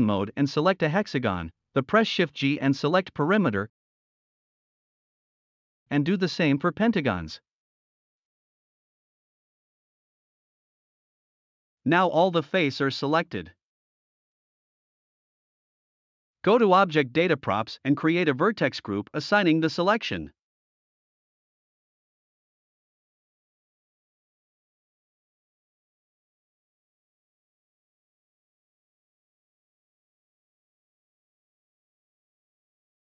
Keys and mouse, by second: 1.3-1.7 middle drag, 4.8 shift+g, 5.6 middle click, 6.5 middle click, 7.2-7.5 shift+drag, 8.2 shift+g, 9.8-10.2 middle drag, 10.7-11.0 middle drag, 11.1 drag, 11.6 click, 12.1 shift+d, 12.8 click, 13.5 click, 14.6 ctrl+z, 14.9 middle click, 20.0 click, 23.6 drag, 24.2 middle click, 25.4 middle click, 27.0 drag, 28.1 shift+d, 28.6 click, 29.8 middle click, 29.8 click, 30.5 ctrl+z, 30.8 middle click, 32.2 shift+middle click.